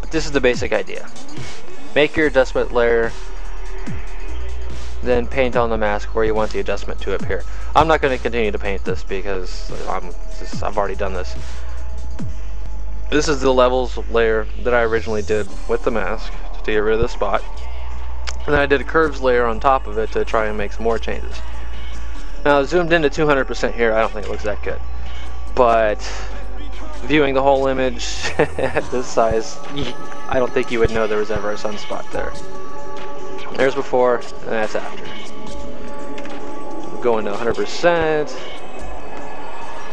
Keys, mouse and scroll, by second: 0.9 click, 5.3 click, 7.1 click, 10.2 click, 13.8 click, 18.0 click, 20.2 click, 35.0 alt+click, 37.8 space, 38.0 click, 39.4 click.